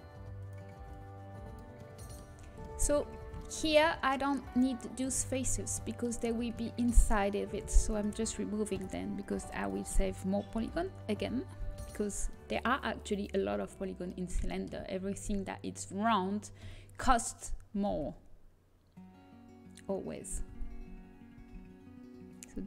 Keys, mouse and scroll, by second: 2.5-7.1 drag, 6.3 z, 7.1-10.1 middle drag, 10.1 Delete, 10.6 l, 11.7 l, 16.5 KP_1, 17.6 g, 20.4 z, 22.1 z.